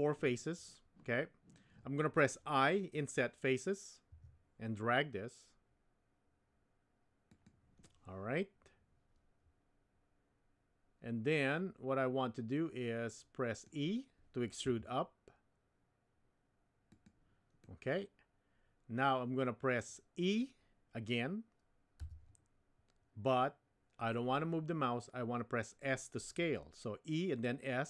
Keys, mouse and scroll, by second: 7.9-13.7 middle drag, 14.6 e, 17.7-19.9 middle drag, 22.0 e.